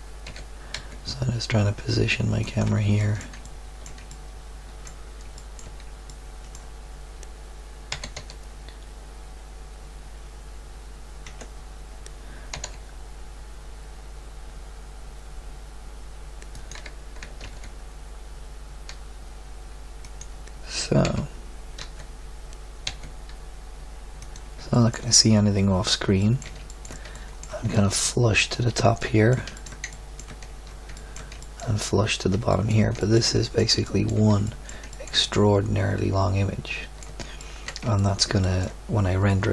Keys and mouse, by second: 0.2 g, 6.2-7.9 middle drag, 7.9 g, 12.5 g, 15.2 click, 17.2 g, 21.0 g, 24.7-25.9 middle drag, 27.7 middle click, 27.9-29.0 middle drag, 31.0-33.2 middle drag, 35.1 middle drag.